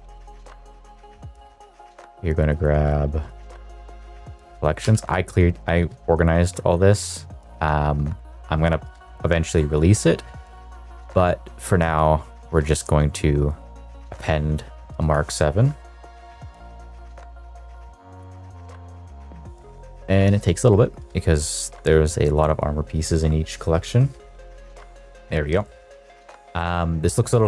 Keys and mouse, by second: 24.8 n, 25.2 middle click, 25.6 shift+middle click, 25.9 middle click, 26.2 shift+middle click, 26.5 middle click, 27.0 middle click, 27.3 middle click.